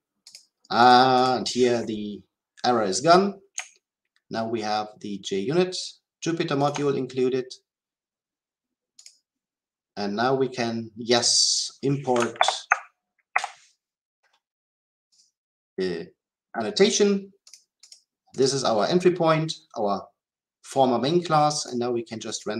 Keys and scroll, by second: 12.3 alt+Return.